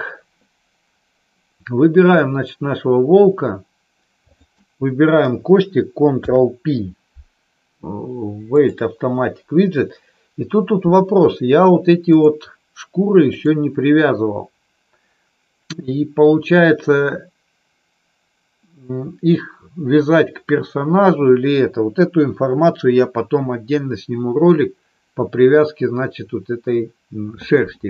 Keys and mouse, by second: 2.0 click, 6.1 ctrl+p, 13.2 click.